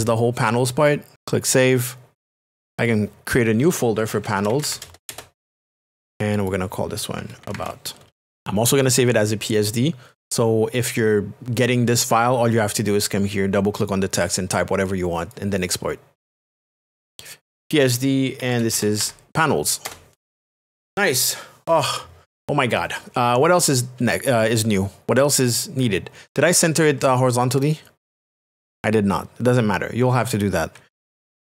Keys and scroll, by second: 3.7-5.1 typing, 6.9-8.1 typing, 18.2-19.5 typing, 19.8 Return, 26.6 ctrl+a, 27.8 a.